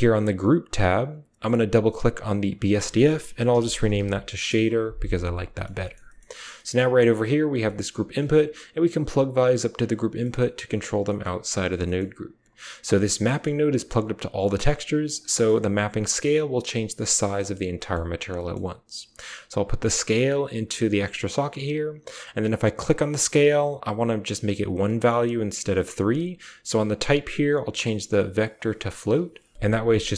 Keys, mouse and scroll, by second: 0.3 drag, 2.6-4.2 middle drag, 6.4 click, 7.6 click, 8.1 g, 10.1 click, 11.8 click, 12.3-12.7 drag, 12.3-13.1 typing, 13.2 click, 14.4 click, 14.9 click, 15.3 click, 17.2 click, 17.7 click, 19.4-20.7 drag, 20.9 click, 21.1 typing, 22.6 click, 26.9-28.5 drag, 29.8 click.